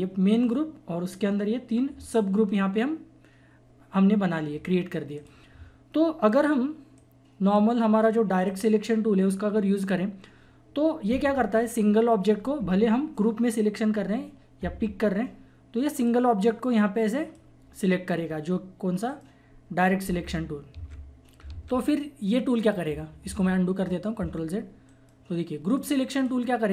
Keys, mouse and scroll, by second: 2.4 click, 2.4 typing, 5.1-8.4 drag, 15.9-19.0 drag, 19.0 right click, 20.7 ctrl+z, 21.5 ctrl+z, 22.6 click, 22.9 typing, 23.8 ctrl+z, 24.8 right click, 25.7 click.